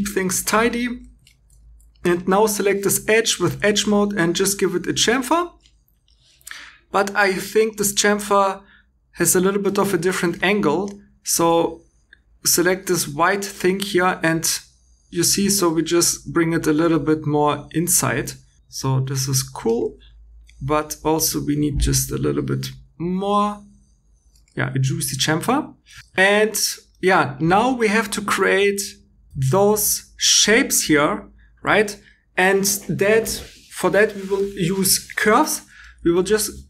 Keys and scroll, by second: 0.4 shift+e, 1.4 2.